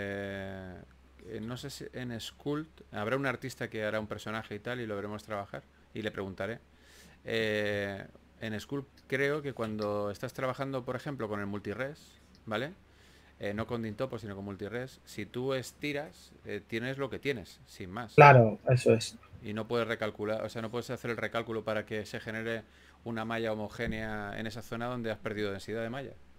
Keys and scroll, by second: 3.5-5.0 typing, 13.1-15.1 typing, 16.0 super+z, 17.3 super+z, 18.3 s, 22.1-22.9 typing, 25.5-26.3 typing.